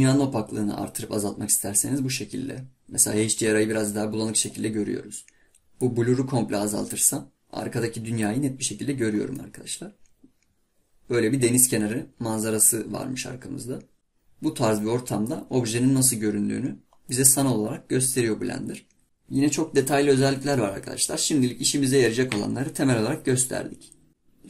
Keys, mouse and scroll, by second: 8.6-9.4 scroll down 6, 9.4-12.4 middle drag, 14.0 scroll up 3, 14.8-16.2 middle drag, 16.2-17.1 scroll up 2, 17.1-19.0 middle drag.